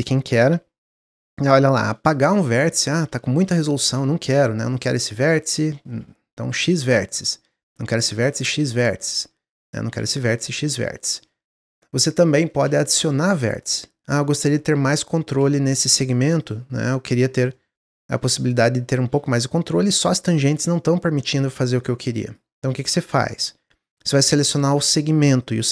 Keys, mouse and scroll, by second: 1.2-4.6 middle drag, 4.6 click, 7.4 click, 8.7 middle click, 9.5 click, 9.8 x, 10.6-11.6 shift+middle drag, 11.6 scroll down 1, 11.9-14.0 middle drag, 14.0 click, 14.9 shift+click, 16.3 click, 16.7 click, 17.0-18.3 middle drag, 18.3 click, 19.2 click, 20.0 click, 23.4 click, 25.2 shift+click.